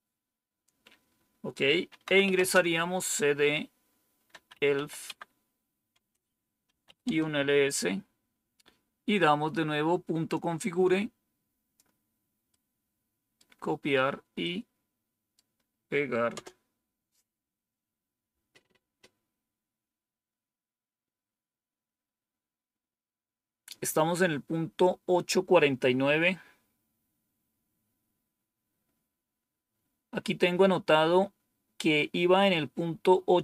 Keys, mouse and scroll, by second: 1.7-2.7 typing, 4.1-5.2 typing, 6.1 Return, 6.4-7.1 typing, 10.3-11.7 drag, 12.4 right click, 14.3-15.3 right drag, 16.3 Return.